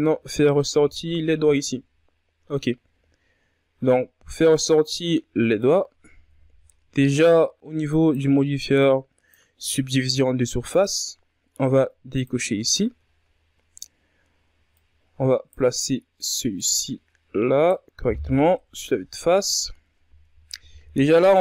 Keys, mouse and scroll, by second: 0.6-1.0 scroll up 3, 1.0 Tab, 1.8 KP_3, 3.1 scroll up 1, 5.2 scroll down 1, 5.4-7.3 middle drag, 7.3 KP_3, 13.2 click, 14.2-14.5 shift+scroll up 3, 15.8 right click, 17.6 right click, 19.6 KP_1, 20.4-21.0 ctrl+scroll up 8.